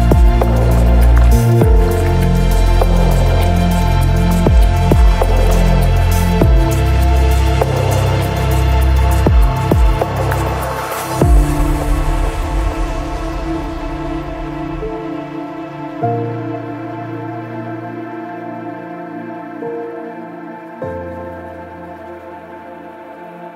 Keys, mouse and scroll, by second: 2.8 click, 3.7 click, 4.9 click, 4.9 shift+KP_0, 5.3 click, 6.4 click, 12.9 click, 13.7 click, 14.0 KP_0, 14.3 middle click, 14.5-15.0 scroll, 14.8 middle click, 15.0 middle click, 15.3 click, 16.2 scroll, 16.4 shift+click, 17.2 KP_0, 17.2 shift+middle click, 17.5 click, 18.1 KP_0, 18.1 click, 18.1 KP_7, 18.4 shift+middle click, 18.6 shift+click, 19.5 shift+middle click, 19.6-21.0 shift+drag, 21.0 middle click, 21.2 ctrl+middle click, 21.2 KP_0, 22.0 click, 22.8 click.